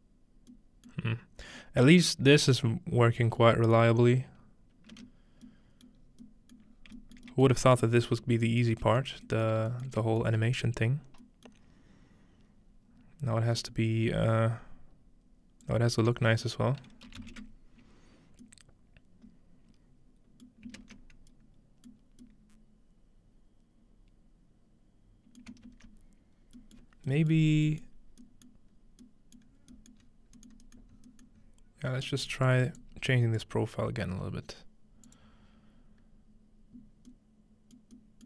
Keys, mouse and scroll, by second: 1.1-1.8 middle drag, 2.1-3.4 middle drag, 3.9-5.4 middle drag, 4.9 space, 6.0 middle click, 6.0-6.7 scroll up 1, 6.7 shift+middle click, 6.7 scroll down 1, 7.2 shift+middle click, 7.4 shift+middle click, 7.6 scroll up 1, 8.1 middle click, 8.2 scroll down 1, 9.2 shift+middle click, 10.7 middle click, 13.1-14.6 scroll down 2, 13.9-15.6 middle drag, 14.6-15.0 scroll down 1, 15.6-17.8 drag, 17.0-17.8 typing, 20.6-21.2 ctrl+middle drag, 21.1-22.0 ctrl+scroll up 2, 22.0-22.7 scroll down 2, 23.8-24.2 scroll down 1, 25.4-26.6 ctrl+middle drag, 26.4-27.1 scroll down 1, 26.8 ctrl+middle click, 27.4 middle click, 27.9 middle click, 28.1-28.8 scroll up 2, 28.5 middle click, 28.8 scroll down 1, 28.9 middle click, 29.6 scroll down 2, 30.0-32.0 scroll up 10, 32.0-34.3 drag, 35.1-36.8 drag.